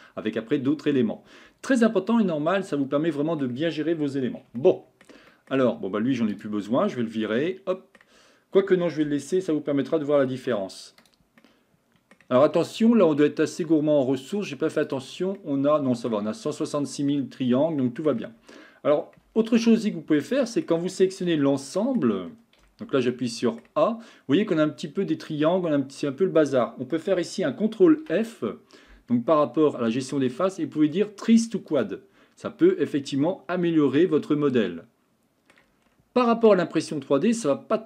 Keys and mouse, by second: 1.9-3.4 middle drag, 4.6 shift+middle click, 5.3 middle click, 6.0 Tab, 6.3 click, 7.3 Delete, 7.7 middle click, 10.4 ctrl+z, 11.0 click, 11.4-12.2 middle drag, 13.5-15.1 drag, 15.4-16.1 middle drag, 17.8 shift+middle click, 19.4 Tab, 19.8 shift+middle click, 20.4 middle click, 21.3 a, 21.8 middle click, 22.7 a, 23.1 middle click, 27.9 ctrl+f, 32.7-35.5 middle drag, 36.5-37.8 middle drag.